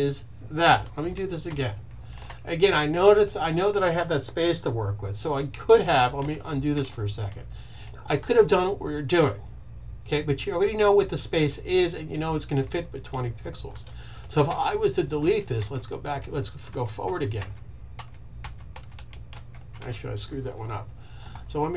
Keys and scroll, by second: 0.8 super+z, 1.2 super+z, 5.9 super+z, 6.5 super+z, 14.3 super+z, 15.1 super+z, 15.5 super+z, 16.6 shift+super+z, 16.9 shift+super+z, 17.2 shift+super+z, 17.8 shift+super+z, 18.1 shift+super+z, 18.6 shift+super+z, 19.1 shift+super+z, 19.5 shift+super+z.